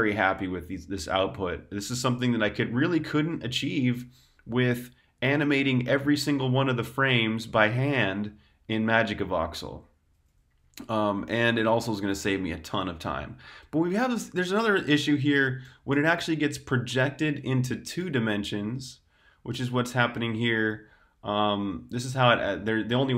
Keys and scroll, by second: 5.8-10.2 typing, 15.2 u, 15.5 u, 15.8 u.